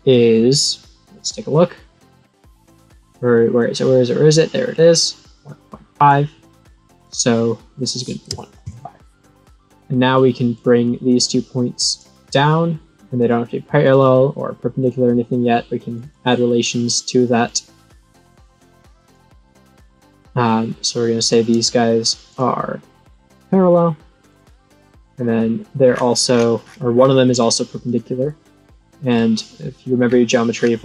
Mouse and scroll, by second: 1.1 click, 4.7-6.0 drag, 6.9 click, 10.5 click, 11.8 click, 13.1 click, 14.7 click, 15.8 click, 17.4 click, 18.5 click, 18.9 click, 19.0 click, 19.4 right click, 19.9 click, 21.1 click, 22.2 click, 23.5 click, 24.3 click, 24.9 click, 25.8-27.8 scroll down 11, 27.8 click, 29.0 click, 29.7-30.1 scroll down 7, 30.6 scroll down 1.